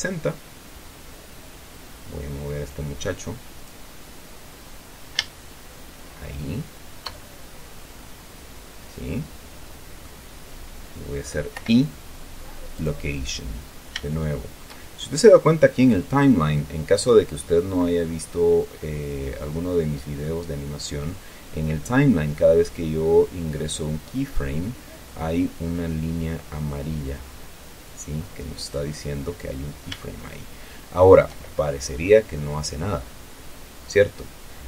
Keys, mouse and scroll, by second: 3.0-4.2 drag, 5.6-7.5 shift+middle drag, 8.3-10.6 drag, 11.9 i, 13.2 click, 14.4 shift+click, 19.3-19.9 scroll down 1, 29.0 click, 30.5-31.7 shift+middle drag.